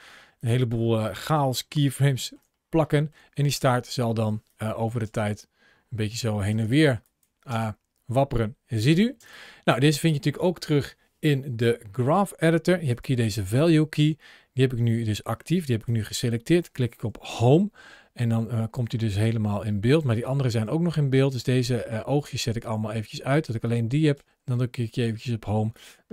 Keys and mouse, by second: 0.2 click, 0.6 ctrl+v, 2.0 shift+middle click, 2.8 shift+middle click, 4.3-4.7 drag, 4.8 space, 6.3 space, 6.9 drag, 12.7 click, 16.0 click, 17.1 Home, 18.1-20.0 middle drag, 20.0 click, 22.4 drag, 23.5 click, 24.0 Home, 25.6-26.1 drag.